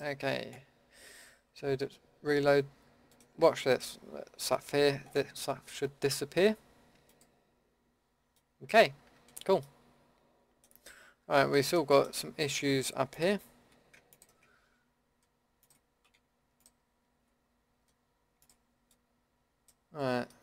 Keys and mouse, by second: 3.4 a, 6.9-8.7 drag, 9.4 Tab, 11.1 Tab, 12.0 click, 12.1 Tab, 12.6 Tab, 13.1-14.1 drag.